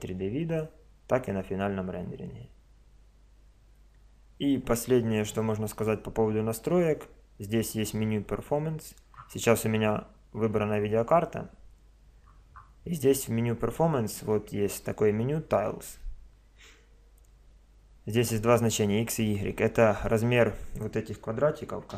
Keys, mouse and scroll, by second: 3.9-7.7 middle drag, 7.7-9.4 drag, 9.4 middle click, 9.5 click, 9.5-11.5 middle drag, 12.3-14.8 middle drag.